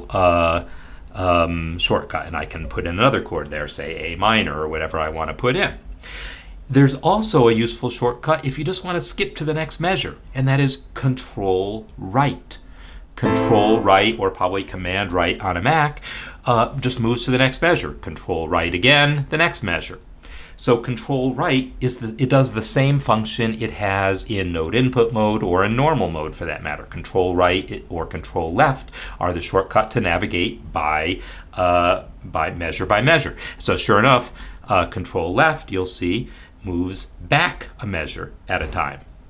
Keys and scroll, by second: 0.5 shift+a, 2.5 m, 12.9 ctrl+Right, 18.6 ctrl+Right, 34.2 ctrl+Left, 36.5 ctrl+Left, 38.6 ctrl+Left.